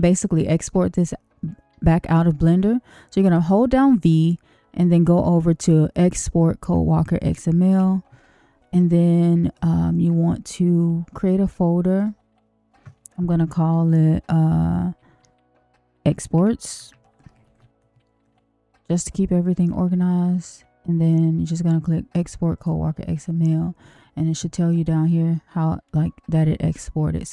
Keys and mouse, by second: 3.3 v.